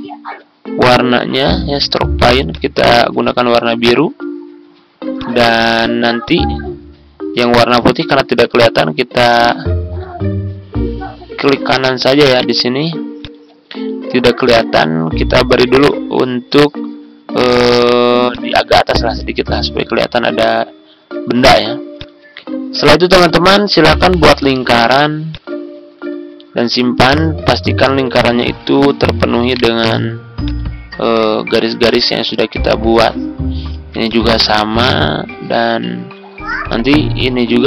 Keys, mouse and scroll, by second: 7.2 ctrl+d, 7.5-10.5 drag, 12.3 right click, 13.1 click, 22.8 ctrl+click, 25.3-28.5 drag, 29.4 right click, 30.3 click, 31.6 ctrl+scroll up 1, 31.9 click, 33.7 ctrl+d, 34.0-35.5 drag, 35.7 ctrl+scroll down 1, 37.2 ctrl+d, 37.5-37.6 drag.